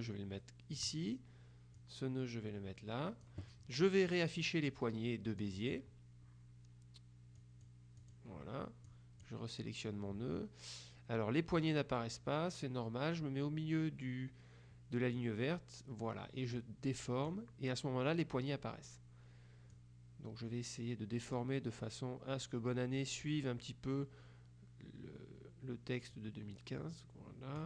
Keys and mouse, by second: 1.9-3.9 drag, 5.5 click, 7.5 click, 15.3-17.9 drag, 19.8-21.9 drag, 26.2-27.6 drag.